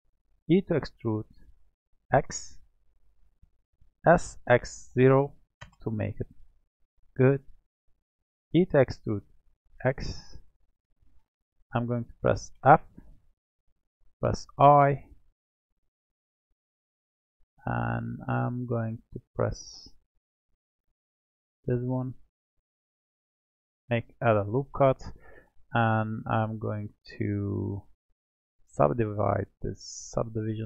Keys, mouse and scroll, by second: 0.4 e, 4.1 s, 6.7-8.5 middle drag, 8.5 e, 12.5 f, 13.1-14.4 middle drag, 14.4 l, 17.2-19.2 middle drag, 19.2-23.2 drag, 24.7-25.7 middle drag, 25.7 Tab, 27.5 click, 28.7 click, 30.1-30.6 drag.